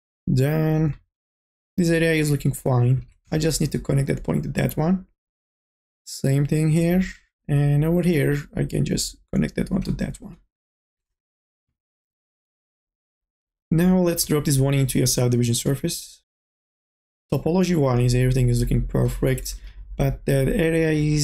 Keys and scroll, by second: 11.5 2, 11.9 e, 19.5 n, 19.8 a.